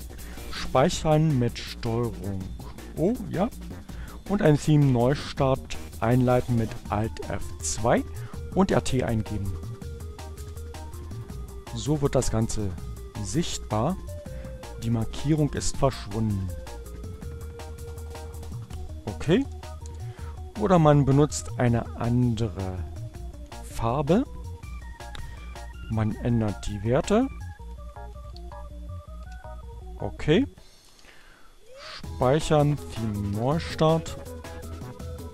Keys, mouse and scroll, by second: 1.5 ctrl+o, 1.9 ctrl+Return, 2.7 alt+F2, 3.9-4.7 typing, 9.3 Return, 17.5 click, 18.7 BackSpace, 19.4 Left, 22.0 Delete, 23.2 Right, 24.5 Right, 26.9 Delete, 27.6-28.8 typing, 30.6 ctrl+o, 31.0 ctrl+Return, 31.6 alt+F2, 32.7 t, 32.8 Return.